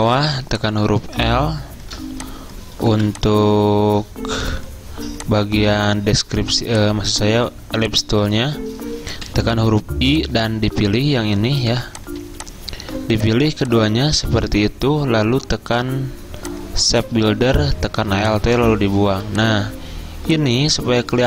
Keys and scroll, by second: 0.0 i, 3.0 v, 9.4 i, 11.7 v, 14.4 ctrl+z, 19.2 v.